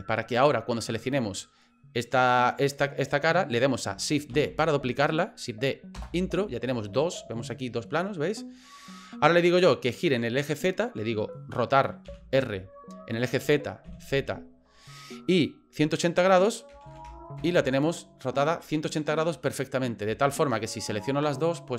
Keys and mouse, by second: 4.3 shift+d, 12.1 r, 20.5 shift+right click, 21.4-21.7 drag.